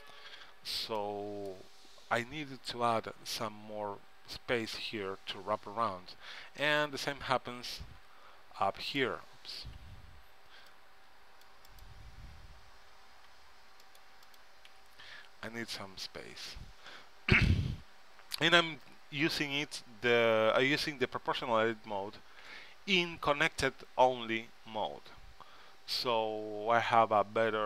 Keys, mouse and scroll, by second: 2.2 KP_3, 3.3 z, 5.8 z, 6.8-8.7 middle drag, 8.5 v, 9.9 a, 10.4 c, 13.5 c, 14.5-16.2 right drag, 14.9 g, 27.4 z.